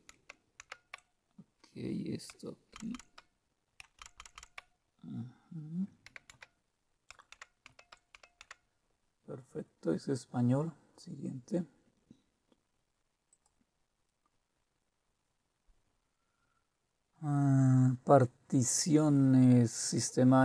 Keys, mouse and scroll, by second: 0.1-0.6 typing, 2.7 typing, 3.9-5.0 typing, 6.0-9.1 typing, 13.3 click.